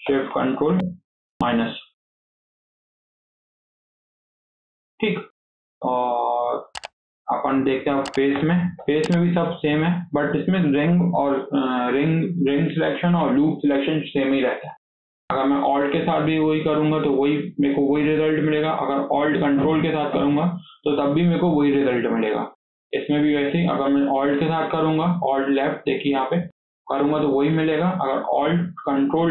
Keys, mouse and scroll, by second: 0.0 ctrl+shift+KP_Subtract, 0.2 ctrl+shift+KP_Subtract, 0.4 ctrl+shift+KP_Subtract, 0.6 ctrl+shift+KP_Subtract, 1.2 ctrl+shift+KP_Subtract, 1.7 scroll down 1, 2.0 middle click, 2.3 click, 3.1 KP_1, 3.6 scroll up 2, 3.9 shift+middle click, 4.2 scroll down 2, 4.4-8.2 shift+middle drag, 8.2 3, 8.6 KP_7, 9.2-9.7 scroll down 1, 9.7 scroll up 1, 9.9-13.1 shift+middle drag, 14.4-14.7 scroll up 2, 14.7-16.0 shift+middle drag, 16.0 alt+click, 19.9 ctrl+alt+click, 24.0 alt+click, 27.0-27.4 scroll down 2, 27.4 shift+middle click, 27.9-29.3 scroll up 2.